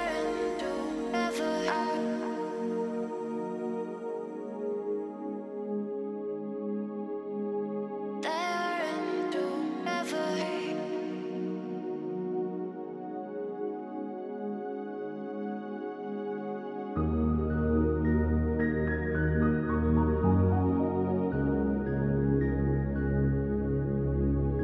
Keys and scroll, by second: 18.2 ctrl+c, 20.2 ctrl+v.